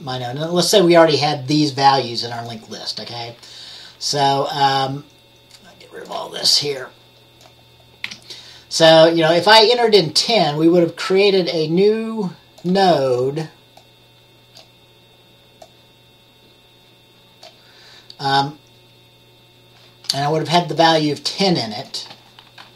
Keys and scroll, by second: 8.2 Delete.